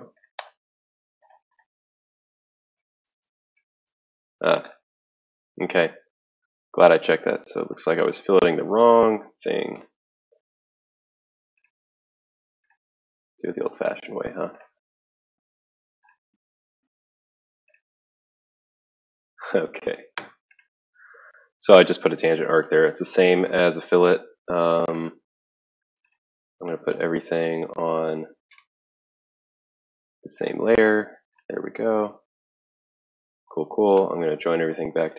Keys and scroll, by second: 0.0-2.6 typing, 3.9-5.8 typing, 7.6 Escape, 9.4-10.2 typing, 11.5 ctrl+z, 11.6 ctrl+z, 12.8-14.6 typing, 16.6-17.5 typing, 19.5 Escape, 20.0-21.0 typing, 21.1 Return, 24.7 typing, 25.7 Escape, 28.1 ctrl+a.